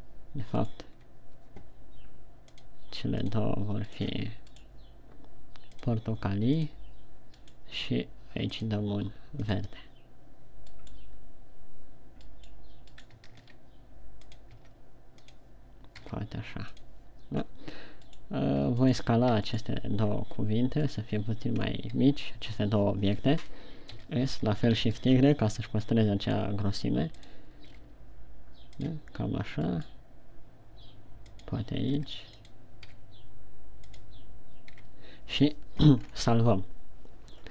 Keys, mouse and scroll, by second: 0.4 right click, 1.1 shift+right click, 3.0 click, 4.6 right click, 6.2 click, 8.0 right click, 9.0 click, 11.3 right click, 12.8 right click, 14.1 shift+d, 15.0 click, 15.0 r, 15.9 click, 16.4 g, 17.3 click, 18.1 scroll down 1, 18.7 right click, 19.4 shift+right click, 20.1 right click, 21.5 right click, 22.0 scroll up 2, 24.4 s, 27.8 click, 28.1 g, 29.6 click, 30.3 right click, 32.5 r, 33.0 click, 33.5 g, 34.5 click, 35.3 a, 36.5-37.2 scroll down 3.